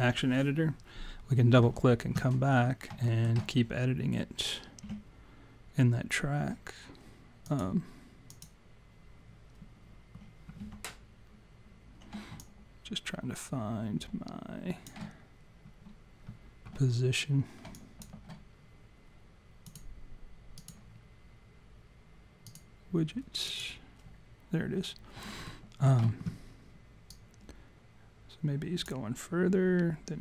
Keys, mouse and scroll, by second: 2.5-3.0 scroll down 3, 3.0 alt+middle click, 4.8 w, 7.6 click, 8.2 click, 10.6 w, 12.4 alt+click, 17.8 alt+click, 19.7 click, 22.5 click, 23.6 click, 25.5 alt+middle click, 27.1 click.